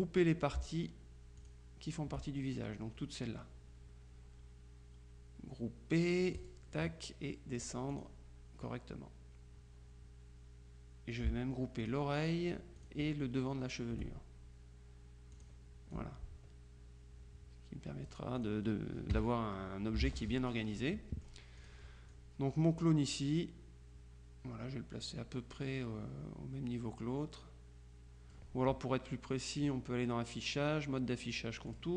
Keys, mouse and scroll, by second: 1.5 shift+click, 6.5 click, 7.7 click, 11.9 shift+click, 12.9 click, 15.4-19.0 drag, 19.2 KP_Subtract, 20.1 ctrl+z, 20.5 ctrl+click, 21.7 click, 29.7 click, 31.7 click.